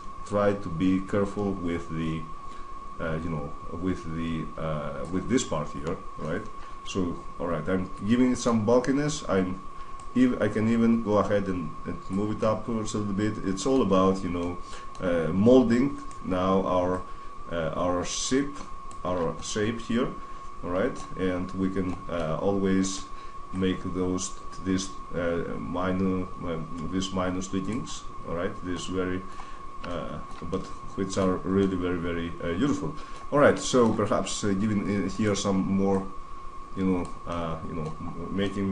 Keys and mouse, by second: 5.6-8.3 middle drag, 9.1 middle click, 9.9-11.7 drag, 12.1-13.9 middle drag, 14.0-14.8 middle drag, 15.3 middle click, 15.7-16.9 right drag, 16.7 click, 16.9-17.5 middle drag, 17.5 click, 18.8 middle drag, 19.1-21.0 middle drag, 21.1-22.6 middle drag, 22.6 right click, 23.4 click, 23.8 middle click, 24.1 middle click, 24.5 click, 27.6-33.9 middle drag, 34.1 middle click, 34.9 right click, 35.8-37.4 drag, 37.4 middle click, 37.5 click, 37.7-38.7 middle drag.